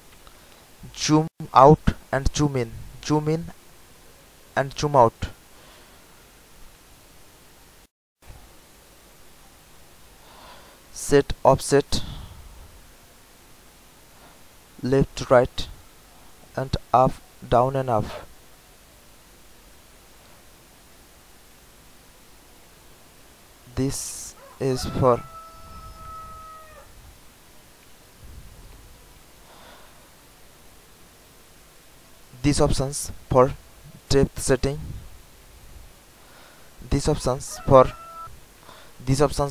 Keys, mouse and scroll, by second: 7.2 ctrl+click, 11.8 ctrl+click, 16.3 ctrl+click, 20.8 ctrl+click, 23.5 click, 29.2 alt+middle click, 33.3 ctrl+click, 36.9 ctrl+click.